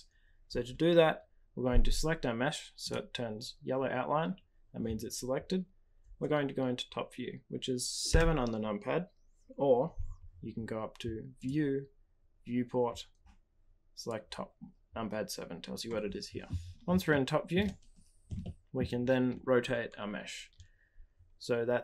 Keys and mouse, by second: 8.0 KP_7, 11.4-16.3 drag, 17.2-17.5 shift+middle drag, 18.4-18.8 shift+middle drag.